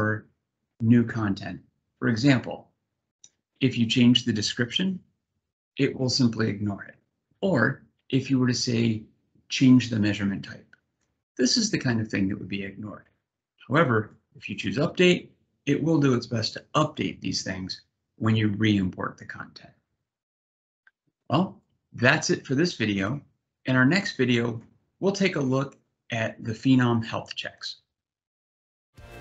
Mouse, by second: 1.9-3.0 drag.